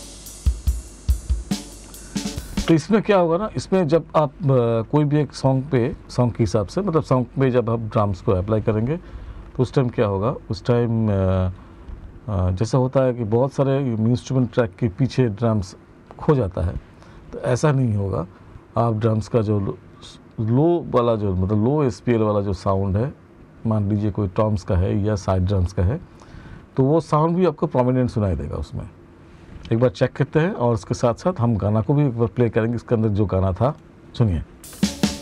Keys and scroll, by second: 2.1 space, 34.0 space.